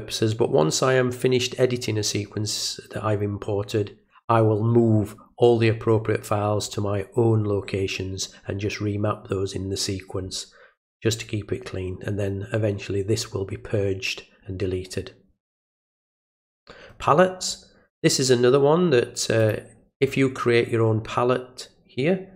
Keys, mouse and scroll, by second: 16.2 click, 16.4 click, 19.4 click.